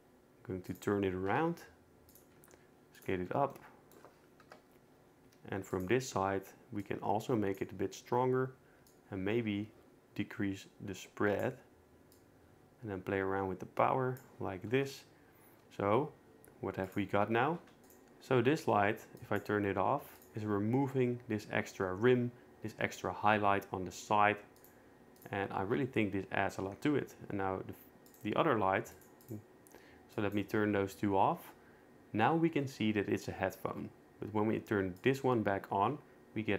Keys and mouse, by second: 1.6 g, 2.4 s, 4.4 KP_0, 5.3 g, 6.8 click, 9.0-11.4 drag, 12.2-14.2 drag, 16.9 click, 17.8 click, 19.2 click, 20.2 click, 24.6 click, 25.2 click, 28.1 click, 29.0 click, 30.2 click, 35.0 click.